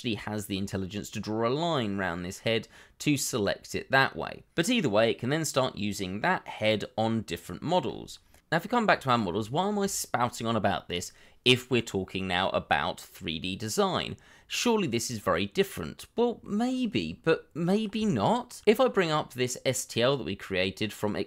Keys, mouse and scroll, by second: 9.4 shift+middle click, 14.6 middle click, 18.2 shift+middle click.